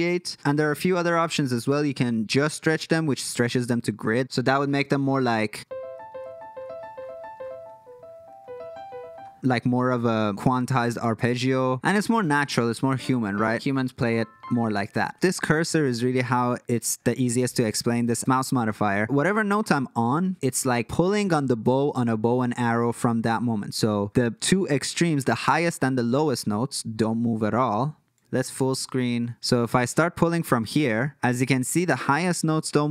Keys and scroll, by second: 28.5 super+f.